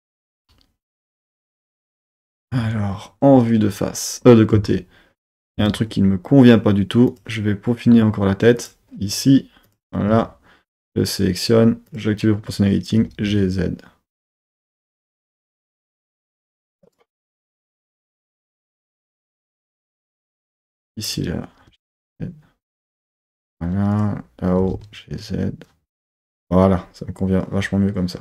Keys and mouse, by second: 0.9 z, 2.4 KP_3, 4.5 shift+middle click, 5.6 Tab, 7.1 click, 8.6 click, 9.6 click, 10.1 1, 10.7 click, 11.9 click, 13.0 g, 13.2 z, 16.1 click, 16.3 z, 16.8 click, 17.2 g, 17.3 z, 18.0 click, 18.3 click, 18.9 g, 19.0 z, 19.4 click, 20.0 z, 21.0 click, 21.6 g, 22.8 z, 23.2 click, 23.9 click, 24.6 g, 24.7 z, 25.9 click.